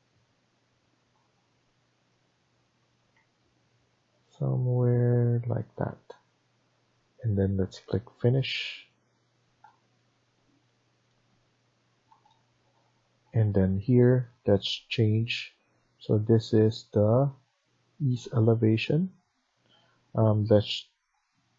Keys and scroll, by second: 3.0 Escape.